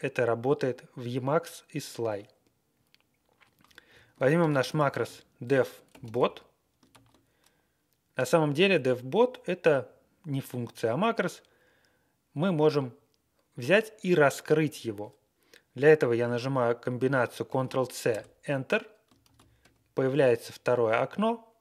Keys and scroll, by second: 4.4 ctrl+r, 4.9-6.7 typing, 6.9 ctrl+a, 17.5 ctrl+c, 18.1 Return, 19.3 ctrl+x, 20.1 ctrl+1.